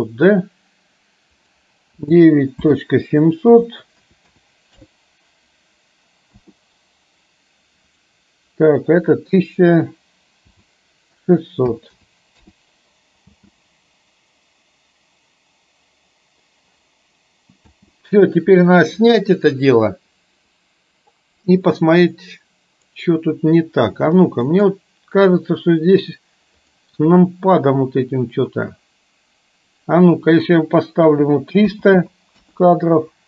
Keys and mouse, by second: 1.5-6.5 drag, 4.2 KP_0, 8.0-12.6 drag, 11.9 KP_0, 13.5 space, 17.8 space, 19.6-22.9 drag, 24.6 click, 26.6 click, 29.8-32.6 drag, 32.0 KP_0.